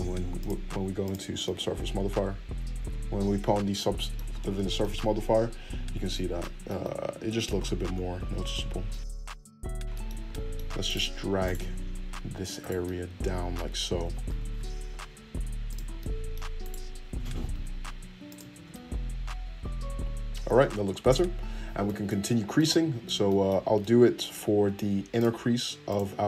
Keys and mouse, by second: 1.3-10.8 middle drag, 8.3 Tab, 10.8 click, 11.3 middle click, 11.4 click, 11.5-12.6 middle drag, 12.6 ctrl+click, 12.7-16.6 ctrl+middle drag, 14.0 g, 16.6 click, 16.7-18.5 middle drag, 17.3 g, 18.5 Tab, 22.3 Tab, 23.6-25.1 middle drag, 25.1 click, 25.3 middle click, 25.8 click, 25.9 middle click.